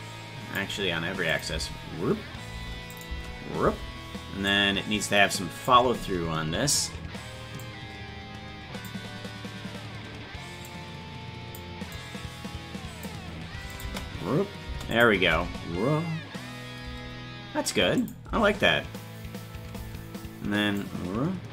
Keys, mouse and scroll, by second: 1.3 click, 1.5 space, 2.9 click, 4.5-5.6 drag, 4.5 space, 7.6-8.8 drag, 10.6 click, 11.9-13.0 drag, 13.7-14.8 drag, 13.8 space, 14.9 click, 15.3 space, 18.0 click, 18.2 space, 20.8 click.